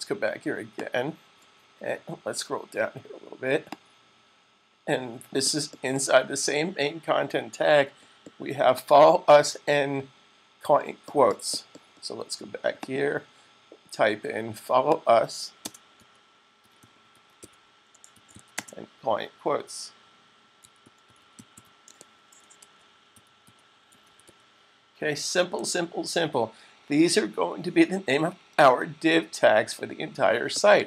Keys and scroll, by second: 16.3-18.7 typing, 20.2-25.4 typing, 27.8-28.5 typing.